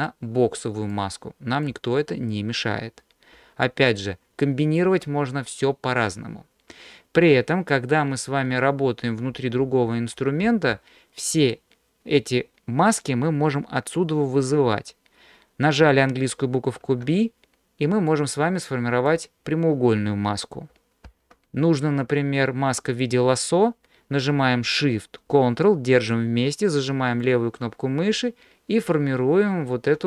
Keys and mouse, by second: 0.9 click, 3.8-4.8 ctrl+drag, 11.5-15.2 drag, 16.9 b, 21.1 ctrl+z, 27.3-29.8 ctrl+shift+drag.